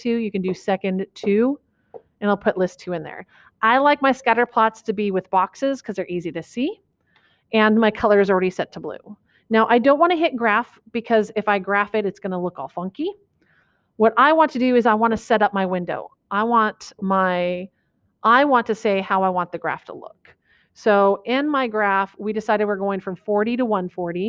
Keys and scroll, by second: 1.4 2, 2.1 Return.